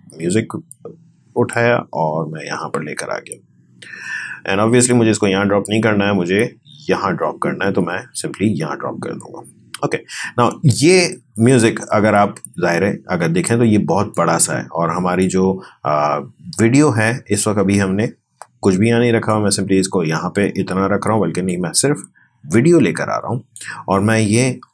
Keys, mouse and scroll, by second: 14.1-16.5 drag, 16.5-17.5 scroll up 1, 19.3-24.7 drag.